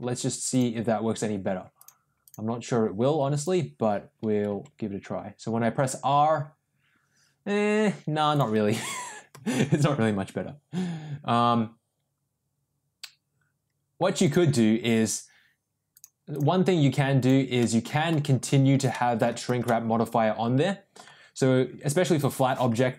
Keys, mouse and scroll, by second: 0.5 click, 1.7-2.3 drag, 4.4 r, 9.0 ctrl+z, 9.3 r, 14.8 ctrl+z, 15.9 click, 17.1 click, 17.6 middle click, 18.8 middle click, 19.6-20.9 middle drag.